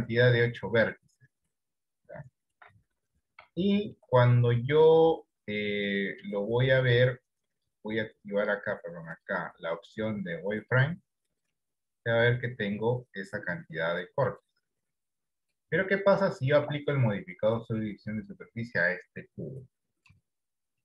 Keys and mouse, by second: 2.8 Tab, 3.9 shift+middle click, 7.8 click, 9.3-11.3 drag, 12.7-14.8 middle drag, 16.3 shift+middle click, 17.9-20.6 drag.